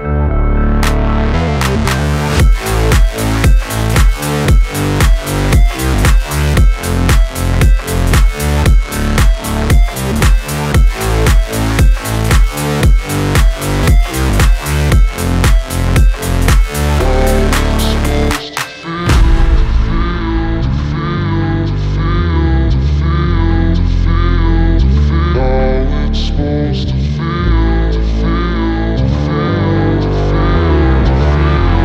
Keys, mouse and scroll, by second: 4.4 v, 5.6 click, 6.7 scroll down 1, 8.1 shift+click, 9.2 scroll up 1, 10.0 click, 12.1 ctrl+s, 14.2 click, 15.7 c, 15.9-17.4 drag, 17.4 right click, 17.9-28.0 drag, 29.7 v, 30.0-31.1 scroll up 1, 31.1 click.